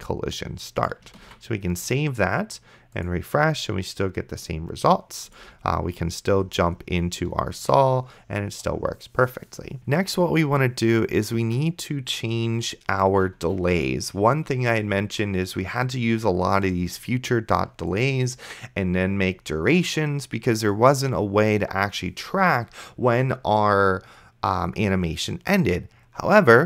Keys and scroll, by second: 1.5 ctrl+s, 5.5 d, 6.7 space.